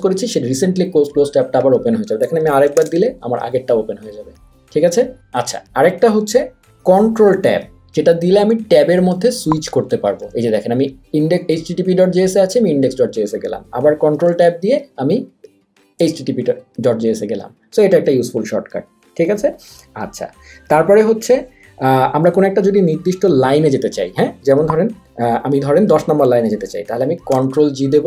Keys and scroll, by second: 2.7 shift+super+t, 9.0 ctrl+Tab, 14.3 ctrl+Tab, 27.4 ctrl+g.